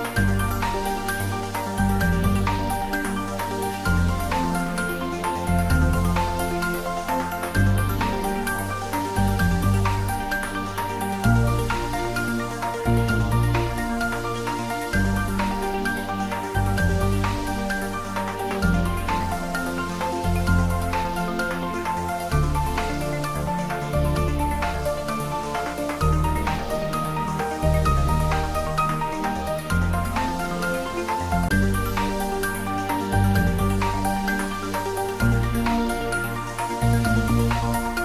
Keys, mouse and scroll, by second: 16.2-21.3 drag, 22.6-23.8 scroll up 1, 25.0 scroll up 1, 27.5-28.8 scroll up 1, 29.1-30.5 drag, 30.5 scroll up 1, 31.0 middle click, 31.6-35.1 drag, 35.1-38.0 drag.